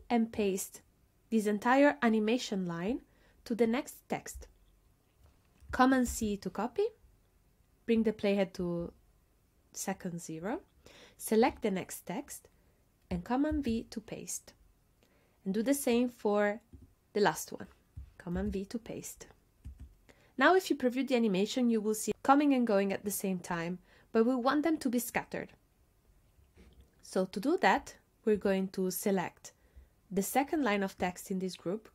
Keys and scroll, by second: 6.1 super+c, 13.5 super+v, 18.4 super+v, 19.7 space.